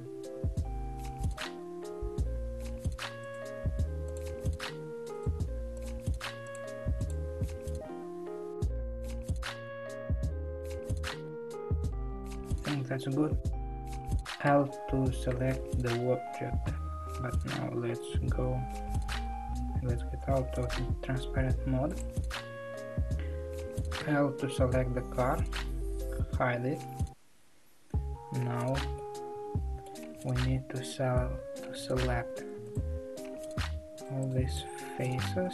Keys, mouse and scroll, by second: 1.4 alt+click, 2.2 s, 4.1 click, 5.8 shift+click, 6.6 shift+click, 7.1 shift+click, 19.3 alt+z, 22.0 click, 24.7 l, 26.3 h, 28.9-31.2 middle drag, 31.2 1, 32.2 3, 32.7 click, 32.9 click, 34.2 shift+click, 34.5 shift+click, 35.1 shift+click.